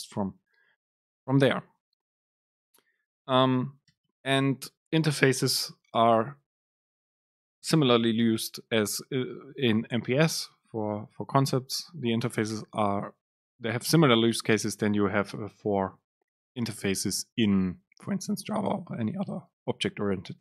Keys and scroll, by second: 4.3 BackSpace.